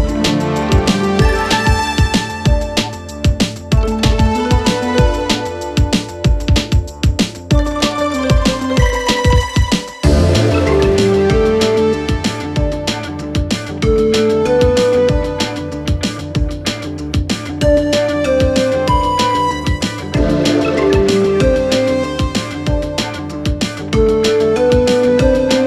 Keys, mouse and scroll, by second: 9.8 n, 10.2-11.4 click, 12.4 right click, 14.4 click, 15.6 click, 16.3-17.7 typing, 18.5-20.7 click, 23.1-23.8 click.